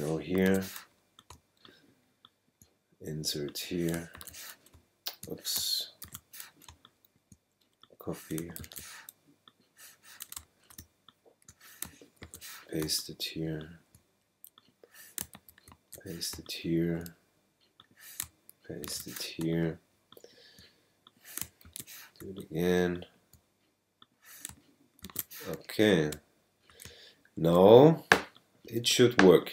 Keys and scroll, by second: 0.4 super+v, 1.3 super+space, 4.2 super+v, 4.7 super+space, 5.3 space, 6.0 super+z, 6.7 super+space, 7.2 space, 8.6 super+c, 10.8 super+space, 11.7 space, 12.2 super+v, 12.8 super+space, 13.3 space, 15.5 super+v, 16.3 super+space, 17.0 space, 18.8 super+v, 19.4 super+space, 20.1 space, 21.6 super+v, 22.2 super+space, 22.7 space, 25.0 super+v, 26.8 super+space, 27.7 space.